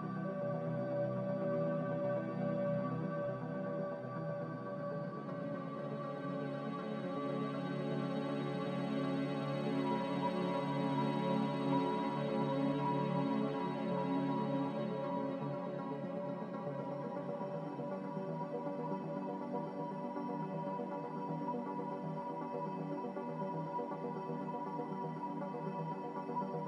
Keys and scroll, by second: 0.5 x, 1.3 z, 2.2 x, 16.9 z, 19.5 Delete, 21.2 a.